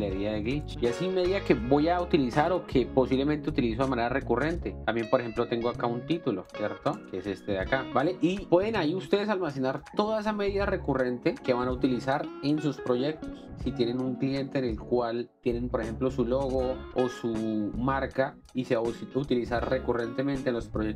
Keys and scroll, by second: 7.0 alt+space.